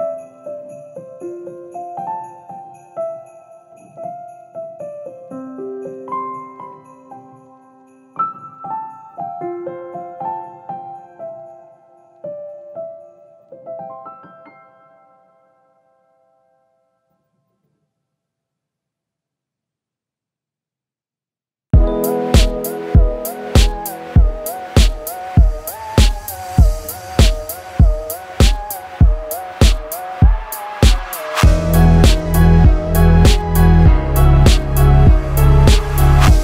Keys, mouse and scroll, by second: 0.3 middle click, 1.8 Tab, 2.2-2.8 scroll up 5, 2.8 scroll down 1, 3.0 scroll down 2, 3.2 shift+middle click, 3.4 middle click, 4.1 click, 4.3 shift+middle click, 5.1 click, 5.5 shift+middle click, 5.9 middle click, 6.0 Tab, 6.5 a, 7.0 u, 8.3 shift+middle click, 9.2 click, 10.0 a, 10.3 r, 15.0 l, 16.9 l, 20.3 Tab, 20.8 click, 21.2 shift+click, 22.7 g, 28.4 g, 31.4 Tab, 32.3 scroll down 4, 33.0 shift+middle click, 33.3 middle click, 33.8 click, 34.1 shift+middle click, 34.2 shift+middle click, 34.9 click, 35.2 shift+middle click, 35.4 middle click, 35.7 Tab.